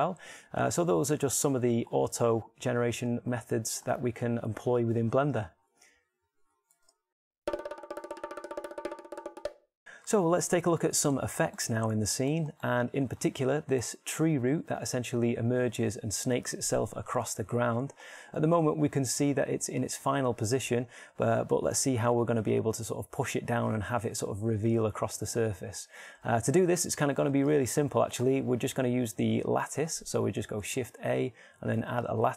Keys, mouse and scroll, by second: 19.5-29.2 shift+middle drag, 30.3 shift+a.